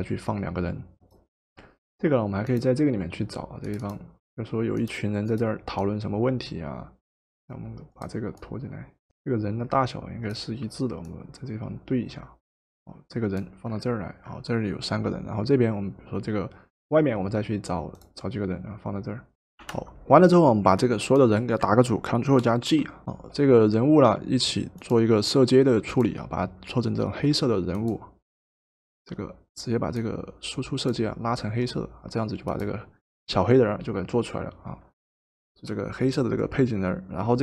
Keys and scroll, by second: 12.6 Return, 19.6 Return, 22.4 ctrl+g, 23.0 Return, 23.0 typing.